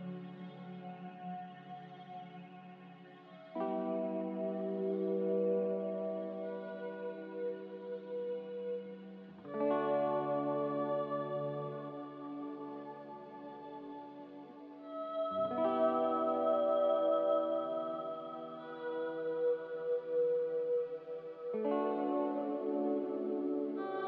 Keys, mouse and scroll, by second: 1.4 a, 4.5 s, 10.2 a, 11.7 z, 15.7 Escape, 15.9 Escape, 16.0 Escape, 16.8 m, 21.5 a.